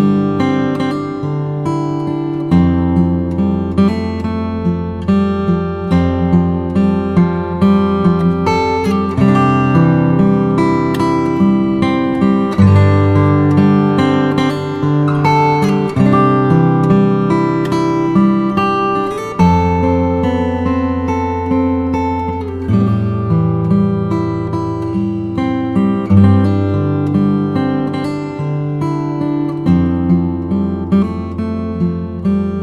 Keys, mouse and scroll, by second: 5.3 click, 6.3-7.6 drag, 8.6 g, 12.9 click, 15.0-16.2 drag, 16.6-19.6 middle drag, 21.0 click, 22.4 click, 23.0 click, 25.1-25.9 drag, 25.9-30.9 middle drag, 30.9 click, 32.0-32.6 shift+middle drag.